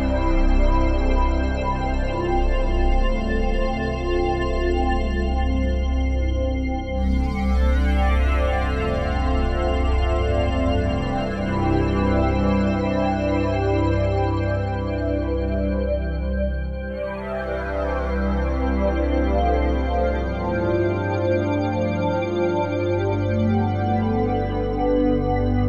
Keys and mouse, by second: 4.4 click, 5.9 click, 6.9 click, 10.9 click, 12.4-15.4 drag, 16.9 click, 17.6-25.6 drag.